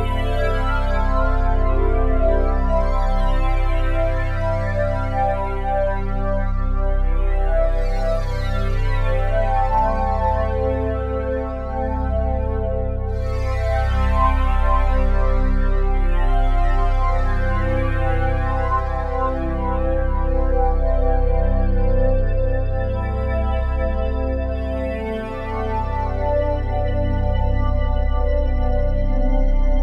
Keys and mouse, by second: 8.0 click, 9.3 g, 10.2-10.5 drag, 10.7-16.4 drag, 18.5 click, 19.8-25.5 drag, 26.0-27.1 drag, 27.1 ctrl+s.